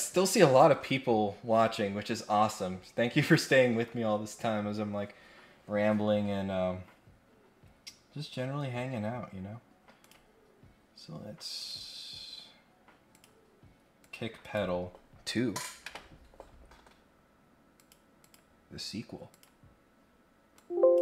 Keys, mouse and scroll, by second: 10.0 click, 11.6 click, 13.1 click, 14.0 click, 14.4 click, 17.7 click, 18.2 click, 19.3 click, 20.5 click.